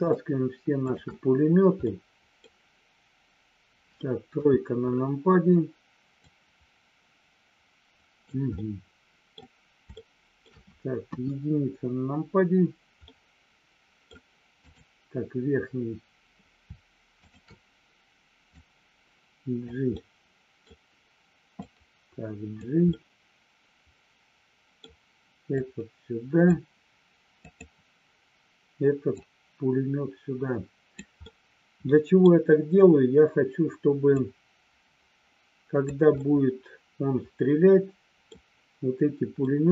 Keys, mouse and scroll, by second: 1.8 middle click, 4.4 KP_3, 6.2-8.2 drag, 8.5 scroll up 1, 8.6 middle click, 9.8 shift+middle click, 11.0 KP_1, 13.1-14.1 middle drag, 14.5 click, 17.2 shift+click, 18.6-19.6 drag, 19.8 middle click, 21.6-22.6 drag, 22.8-24.8 middle drag, 25.6 click, 27.4 click, 29.2-31.0 drag, 31.2-32.2 middle drag, 34.2-35.8 drag, 36.2-38.4 middle drag, 39.5 middle click.